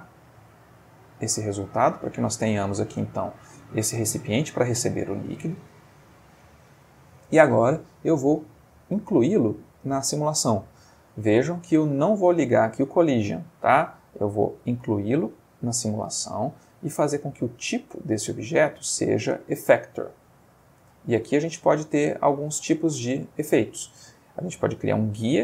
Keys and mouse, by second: 0.7 click, 1.5-5.5 middle drag, 8.2 click, 15.0 click, 18.2 click, 20.0 click, 21.1 click, 23.9 click.